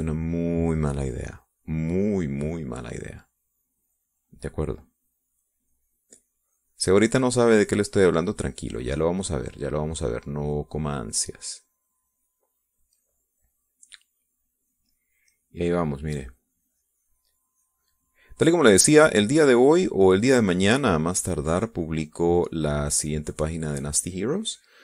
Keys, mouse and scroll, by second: 1.9 middle click, 2.8-4.4 drag, 5.3-11.0 drag, 11.0 middle click, 11.8-15.8 drag, 16.0 middle click, 17.0-19.8 drag, 20.3-23.1 drag, 23.6-24.8 drag.